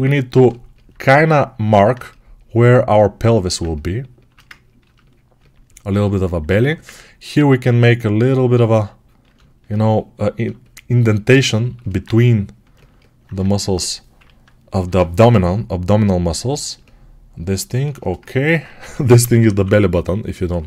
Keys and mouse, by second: 3.1-18.0 alt+right drag, 6.4 1, 14.1 [, 14.6 [, 18.1 ctrl+alt+right click, 18.7 g, 19.1 ], 19.2 ].